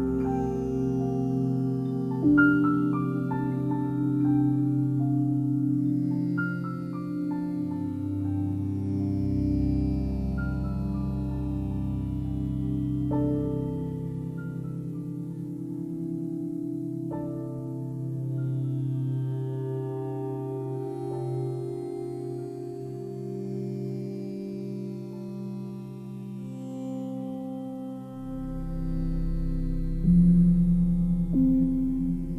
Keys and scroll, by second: 8.5 space, 15.4 ctrl+t, 21.8 space, 24.3 ctrl+t, 26.4 Return.